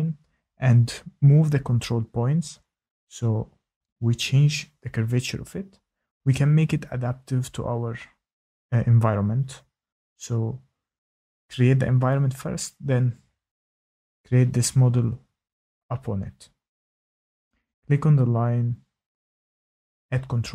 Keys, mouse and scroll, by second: 1.2-1.8 scroll, 4.8 click, 6.1 click, 8.8 click, 11.7 click, 15.0 Escape, 15.8 shift+right click, 18.1 shift+right click.